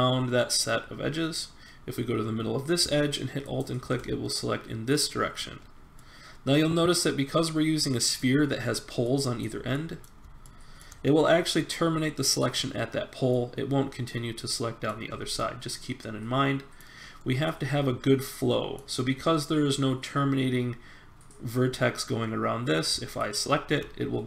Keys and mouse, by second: 3.4-5.2 drag, 5.5-7.9 middle drag, 9.0-12.2 middle drag, 13.4 middle click, 13.6 middle click, 13.8 middle click, 14.0 middle click, 14.5 middle click, 17.2 middle click, 18.6 middle click, 23.4-24.2 middle drag.